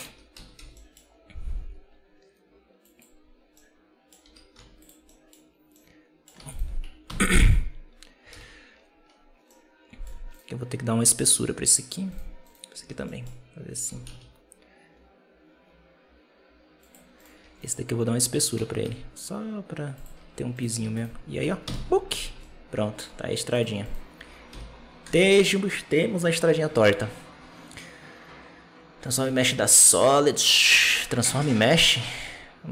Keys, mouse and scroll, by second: 0.2 a, 0.4 g, 3.4 middle click, 4.1 Tab, 4.4 z, 4.9-5.3 middle drag, 5.3-5.6 scroll up 1, 5.6-6.4 middle drag, 7.1 ctrl+KP_Subtract, 8.7 ctrl+z, 8.8 scroll up 1, 8.9 scroll down 2, 9.0-9.3 scroll up 2, 9.3-10.2 middle drag, 10.2 right click, 10.6 scroll down 1, 11.1-12.0 middle drag, 12.4 right click, 12.7 Tab, 12.9 middle click, 13.6 a, 13.8 s, 17.1 right click, 17.3 Tab, 18.2 Tab, 18.5 a, 18.7 e, 20.1 Tab, 20.9 shift+right click, 21.6 ctrl+KP_Subtract, 22.2 alt+a, 22.3-23.4 middle drag, 23.4-24.4 right drag, 24.4 h, 24.9 KP_0, 29.1 z.